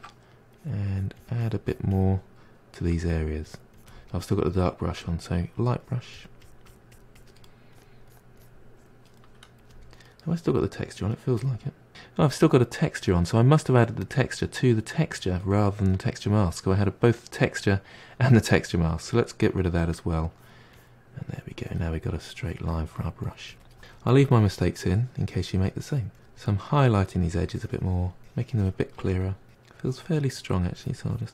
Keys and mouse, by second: 0.5-2.8 drag, 2.8 f, 3.4-5.0 drag, 5.8-9.2 drag, 9.2 f, 10.2-11.4 middle drag, 11.4 click, 16.6-19.1 middle drag, 19.1 click, 20.3-27.3 drag, 27.3-27.7 middle drag, 27.7 click, 28.3 f, 28.5-29.0 drag, 29.0-29.5 middle drag, 29.5-30.9 drag, 30.9 f, 31.2-31.3 drag.